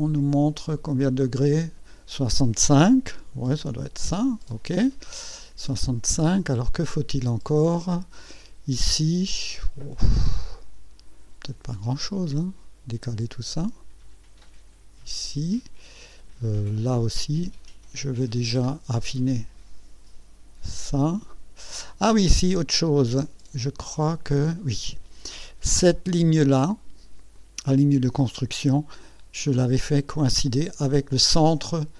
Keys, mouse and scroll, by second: 1.0 click, 3.3 KP_6, 3.7 KP_5, 4.1 KP_Enter, 5.5 scroll up 2, 6.0-6.4 scroll down 2, 6.5 right click, 7.7-8.4 right drag, 10.2-11.3 right drag, 13.0-15.3 drag, 16.9 scroll down 1, 18.6-21.0 drag, 21.3-21.6 scroll up 1, 27.3 click, 30.1 click.